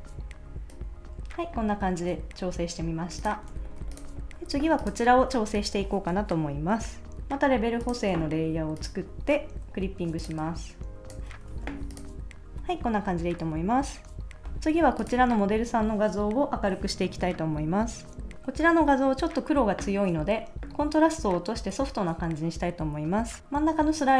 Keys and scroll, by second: 3.5 super+s, 11.6 super+s.